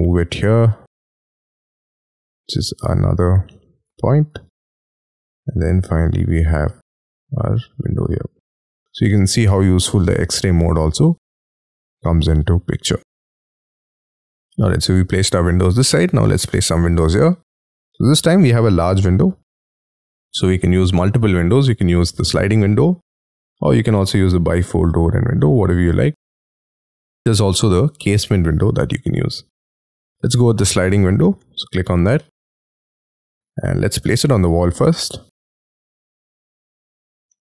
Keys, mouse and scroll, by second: 1.9-2.4 scroll up 6, 3.1 scroll down 6, 3.4 space, 3.8 m, 4.8-5.4 scroll down 10, 5.4-6.5 scroll up 15, 8.7 middle click, 10.4-11.1 scroll down 12, 11.1 middle click, 12.9-13.6 scroll down 10, 13.2 space, 14.1 y, 14.5 middle click, 16.2 scroll up 6, 16.5 middle click, 16.9 scroll down 4, 17.1 y, 17.3 scroll up 5, 17.6 middle click, 31.9 scroll up 3, 32.1 middle click, 32.3-33.0 scroll down 5, 35.1 middle click, 36.1 scroll up 3, 36.3 y, 37.3 middle click.